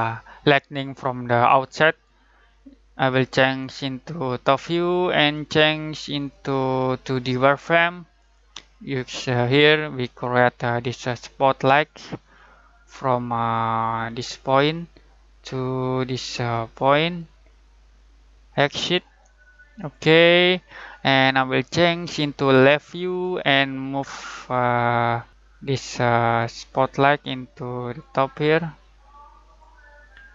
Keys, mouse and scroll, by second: 3.6 click, 12.6-14.5 scroll up 1, 14.7 click, 17.0 click, 23.9-24.6 scroll down 1, 24.6 middle click, 26.2 click.